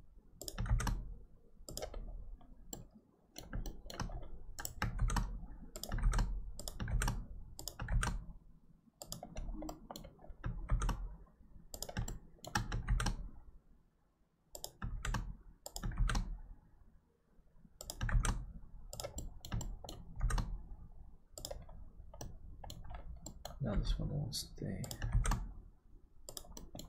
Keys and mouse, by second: 0.6 shift+d, 2.8 middle click, 3.7 shift+middle click, 5.0 shift+d, 7.0 shift+d, 9.7 middle click, 12.1 shift+middle click, 19.2 middle click, 19.6 shift+middle click, 22.2 middle click, 23.3 middle click, 23.7 g, 25.1 shift+d, 26.5 middle click.